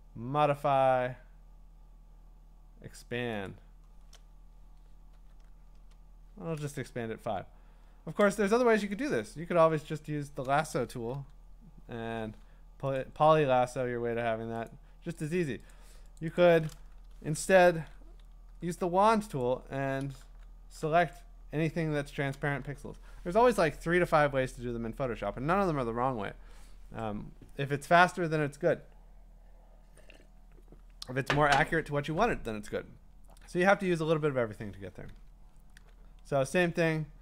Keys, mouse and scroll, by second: 3.5 click, 5.1 5, 5.7 Return, 6.8 scroll, 7.0-7.5 scroll up 8, 7.7-8.1 scroll down 8, 8.3 ctrl+d, 12.0 click, 12.0 i, 13.0 click, 14.7 click, 15.2 click, 15.7 click, 16.2 click, 16.4 click, 17.7 ctrl+d, 18.5 w, 19.4 click, 20.3 w, 21.1 click, 32.8 click, 35.3 scroll, 37.0-37.2 scroll.